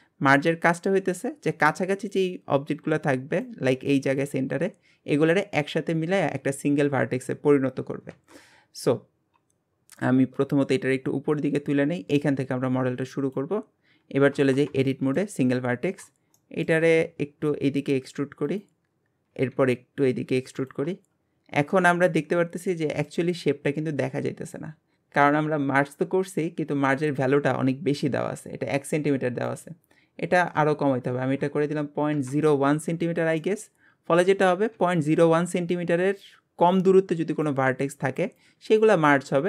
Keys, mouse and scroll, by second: 0.5-1.0 scroll down 1, 1.0 scroll up 1, 8.5 scroll down 3, 10.3 click, 13.6 scroll up 1, 14.4 Tab, 14.8 shift+middle click, 15.8-16.4 scroll up 1, 16.4 shift+middle click, 17.0 e, 18.9-19.3 scroll down 2, 19.3 e, 21.7-24.8 middle drag, 29.5-32.5 drag, 33.4-39.4 middle drag.